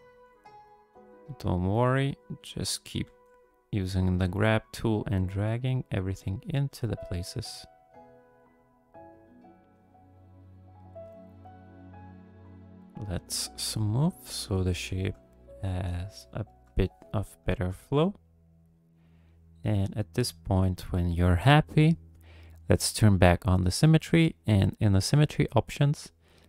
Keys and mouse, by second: 0.7 click, 1.7 click, 1.8 click, 3.0 f, 3.9 click, 4.6 click, 5.8 click, 6.7 f, 7.3 click, 7.4 click, 8.8 click, 9.5 click, 10.4 middle click, 12.2 shift+click, 12.4 shift+click, 12.8 shift+click, 13.2 click, 13.7 shift+click, 14.1 click, 14.3 middle click, 14.5 shift+click, 15.2 middle click, 15.6 shift+click, 15.9 shift+click, 16.6 KP_1, 17.6 shift+click, 18.8 click, 20.3 click, 22.6 click, 24.0-26.4 drag.